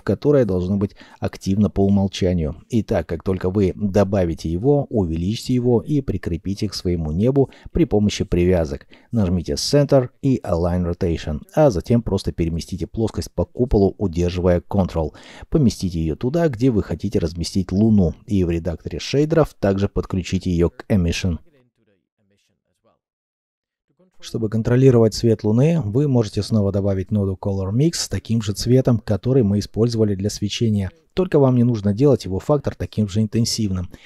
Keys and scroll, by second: 7.6 Escape, 15.3 s, 17.6 g, 18.3 s, 21.3 g, 21.4 y, 22.8 shift+a, 23.2 c, 23.3 ctrl+a, 23.4 g, 23.6 b.